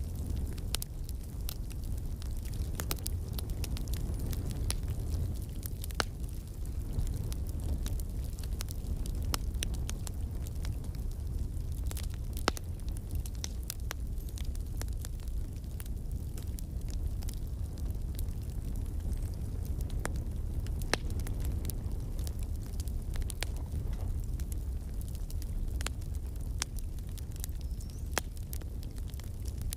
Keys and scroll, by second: 6.9 scroll, 14.9 ctrl+z, 23.4 space, 23.8 scroll, 25.7 shift+space, 26.9 shift+space, 27.3 shift+space, 28.1 space.